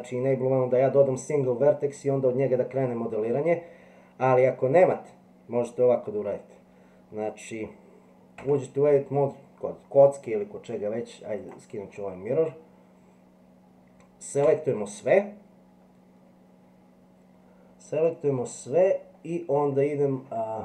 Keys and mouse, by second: 8.4 Tab, 11.4 click, 14.4 a, 18.4-20.1 middle drag.